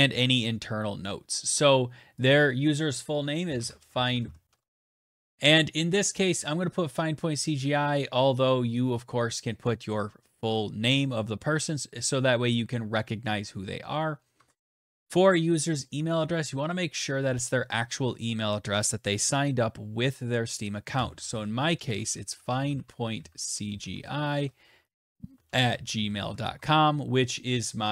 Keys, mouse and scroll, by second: 1.9 click, 2.8-5.7 typing, 13.9 Tab, 20.3-26.3 typing.